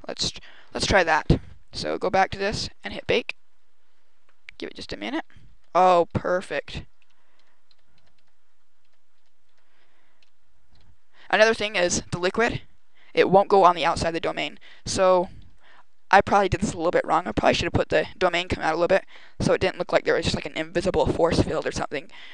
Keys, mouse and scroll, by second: 1.6 right click, 2.7 click, 4.6 Left, 4.8 Right, 4.9 Right, 5.0 Right, 5.3 Right, 5.4 Right, 5.6 Right, 5.8 Right, 6.0 Right, 6.2 Right, 6.2 Right, 6.5 Right, 6.9 Left, 7.2 Right, 7.5 Right, 7.9 Right, 8.0 Right, 8.7 Right, 9.0 Right, 9.3 Right, 10.1 Left, 10.7 Right, 14.4 Right, 14.6 Right, 14.7 Right, 14.9 Right, 15.1 Right, 15.3 Right.